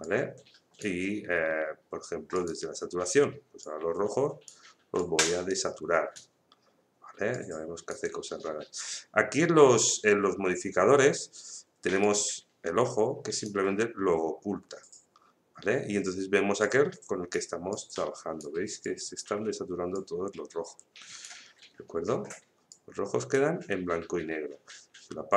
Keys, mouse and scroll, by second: 12.0 click, 16.6-25.3 drag.